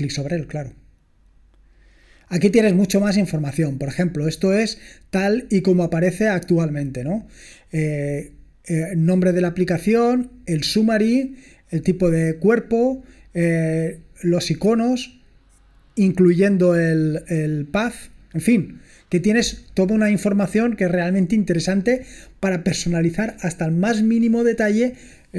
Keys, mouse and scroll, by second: 0.0 click, 1.3-2.0 scroll down 2, 2.0 scroll down 1.